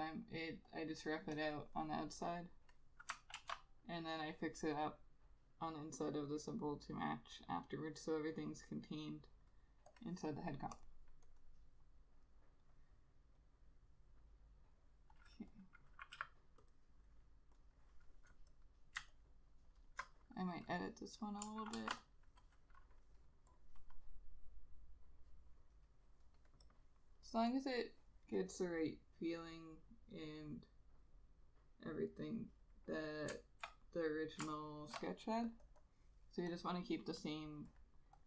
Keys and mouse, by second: 3.5 ctrl+z, 4.3 double click, 16.3 2, 17.8 double click, 19.3 alt+click, 21.9 shift+F5, 27.8 double click, 33.9 ctrl+click, 34.7 ctrl+shift+click, 35.8 double click.